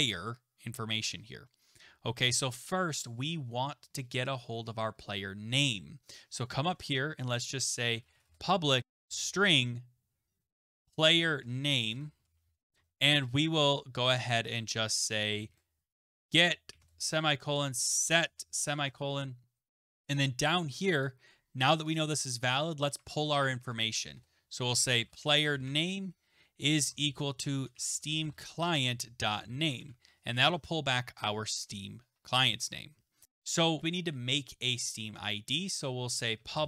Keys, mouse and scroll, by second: 0.0-0.6 scroll, 1.1-3.0 scroll, 3.0 scroll, 3.9-5.5 scroll, 5.5 scroll, 6.1 click, 6.7 Return, 7.6-18.3 typing, 19.9-20.6 typing, 20.1 click, 21.0 click, 21.9 click, 22.4 click, 22.9 click, 23.0 Tab, 23.3 Tab, 23.5 Tab, 23.6 Tab, 24.1 Return, 24.5-30.3 typing, 33.0-33.7 typing, 33.2 click, 36.2-36.6 typing.